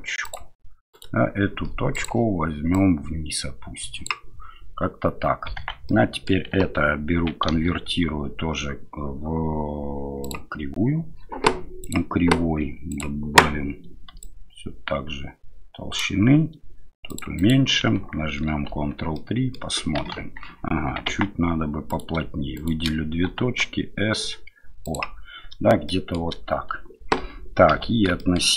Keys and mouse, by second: 0.9 right click, 2.7-5.6 drag, 5.6 Tab, 5.9 middle click, 7.5 w, 18.7 ctrl+3, 19.1-19.5 middle drag, 20.1 KP_1, 21.1 Tab, 21.9 click, 22.5 shift+click, 23.2 s, 25.9 shift+middle click, 27.7 a, 28.2 shift+middle click.